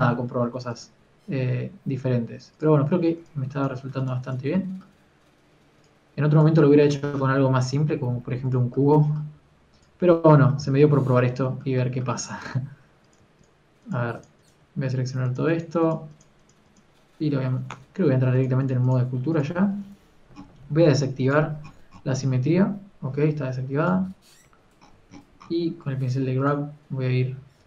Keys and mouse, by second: 2.0 g, 5.9 g, 8.5 g, 10.3 g, 10.9 a, 18.7 Tab, 20.9 t, 24.0 t, 24.6 f, 25.4 t, 26.8 t, 27.2 f.